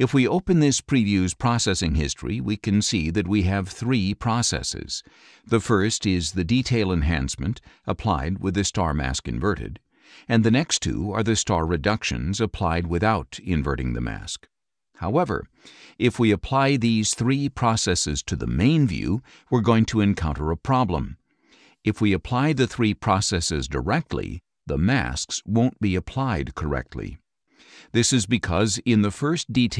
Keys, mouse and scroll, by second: 0.5 click, 3.2 click, 9.8 click, 10.7 click, 15.9-18.6 drag, 19.2-22.7 drag, 23.5 click, 24.3 right click, 26.2 click, 28.7 click.